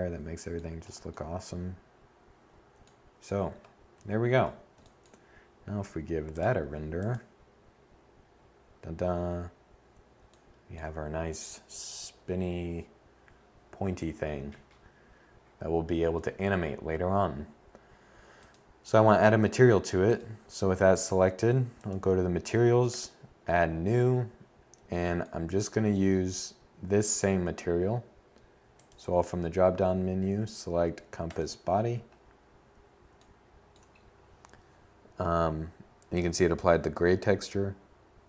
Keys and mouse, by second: 2.0 7, 10.9-16.4 middle drag.